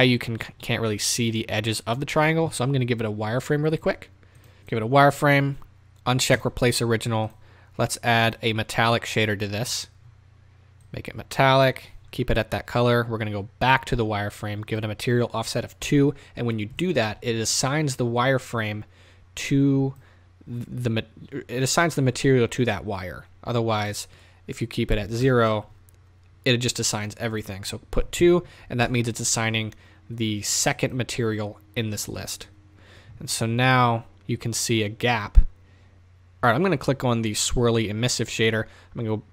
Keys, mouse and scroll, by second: 4.7-6.5 drag, 8.3-8.7 drag, 9.3 drag, 10.9-16.9 drag, 11.7-16.7 scroll up 1, 16.8 KP_Enter, 18.2 click, 25.4 KP_Enter, 29.0 KP_Enter, 29.0-35.9 drag, 36.4 click.